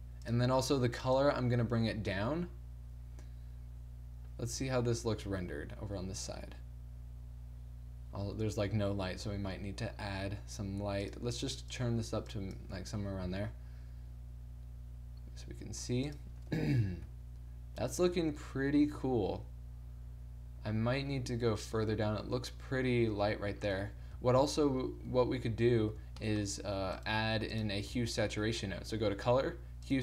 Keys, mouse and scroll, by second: 0.3-5.5 drag, 5.5 shift+z, 9.3 z, 9.4 z, 11.1-12.7 drag, 13.1 click, 13.3 shift+z, 16.2 click, 17.1 g, 24.3-28.0 typing.